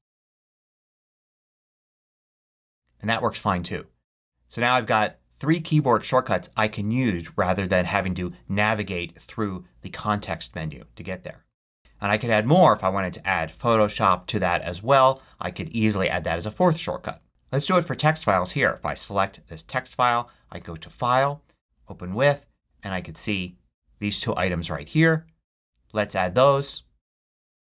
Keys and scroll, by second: 4.0 super+q.